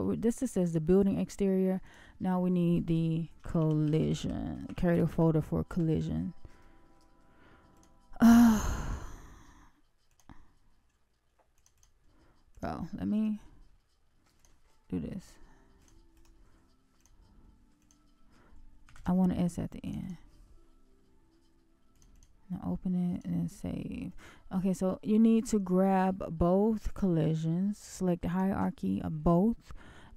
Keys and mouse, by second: 24.8-26.2 right drag, 26.9-28.4 right drag.